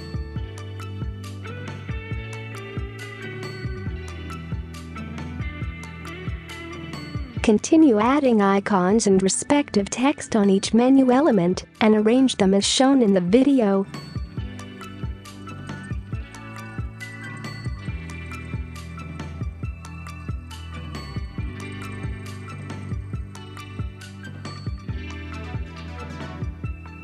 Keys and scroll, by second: 1.4-1.9 typing, 7.3 space, 7.4 space, 10.9-12.9 typing, 14.4 ctrl+a, 14.5-14.9 typing, 16.5 space, 16.7 space, 18.7-19.8 typing, 21.8-22.8 typing, 24.8 ctrl+z, 26.8-27.0 typing.